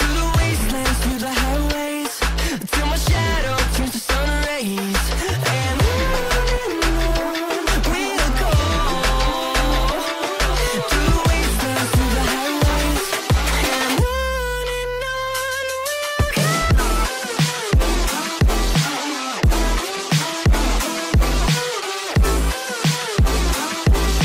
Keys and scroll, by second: 2.3 space, 5.3 ctrl+q, 7.9 space, 16.7 space, 17.3 c.